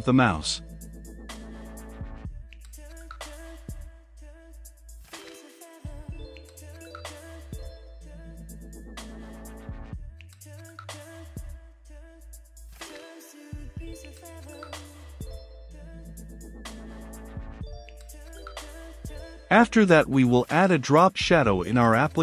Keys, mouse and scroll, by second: 0.5-9.0 drag, 9.0-10.8 typing, 12.0 Return, 12.8-22.2 drag.